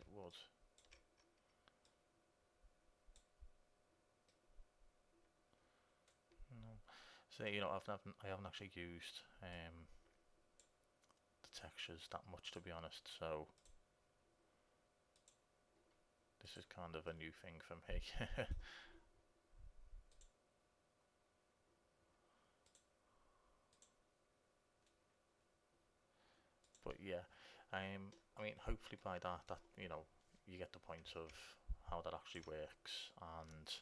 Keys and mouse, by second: 0.5-3.9 drag, 4.8-6.5 middle drag, 9.9-11.6 drag, 12.7-16.2 drag, 17.2 middle click, 17.3-18.5 drag, 18.3-20.4 middle drag, 20.4-22.3 drag, 22.9-28.4 drag, 28.4 middle click, 29.4 middle click, 29.5-31.1 middle drag, 31.6-33.5 drag.